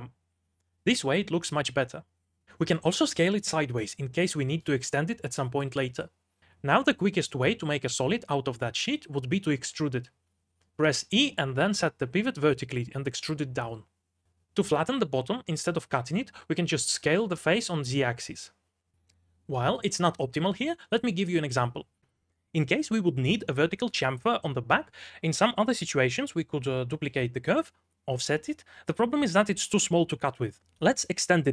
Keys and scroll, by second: 0.2 l, 2.5-4.2 typing, 6.4 3, 9.8 e, 12.1 v, 14.9 3, 16.1 s, 25.7 2, 26.3 shift+d, 27.3 shift+w, 27.6 o, 28.9-31.5 typing.